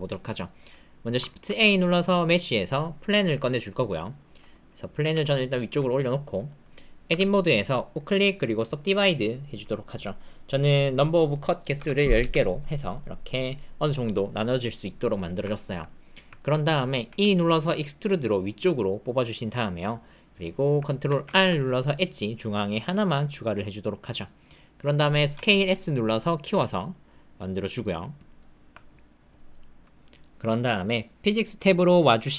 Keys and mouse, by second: 1.4 shift+a, 4.1 click, 5.0 g, 6.2 click, 7.1 Tab, 8.0-8.7 drag, 9.5 click, 11.0-12.2 drag, 13.0 click, 15.0 click, 15.5 ctrl+click, 16.3 ctrl+click, 17.0 e, 21.2 ctrl+r, 25.3 s, 28.6 Tab.